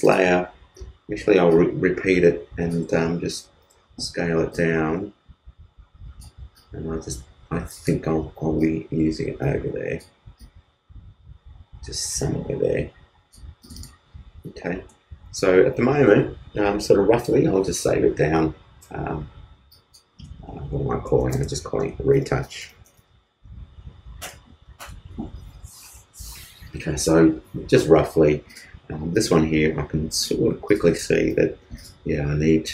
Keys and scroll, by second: 3.7 alt+super+t, 15.1 super+space, 15.3 super+s, 21.3-22.7 typing, 31.3 super+t.